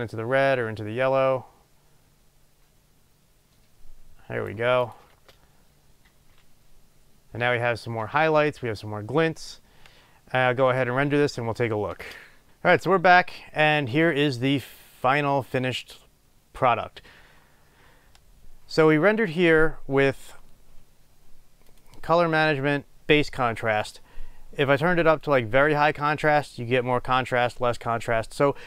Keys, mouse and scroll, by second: 12.2 space, 12.5-28.6 drag.